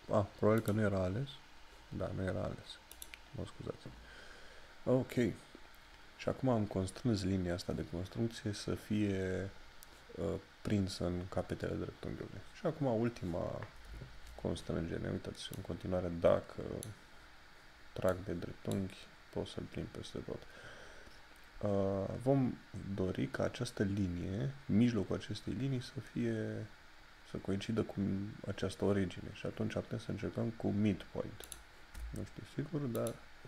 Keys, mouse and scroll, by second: 15.5 click, 31.5 click.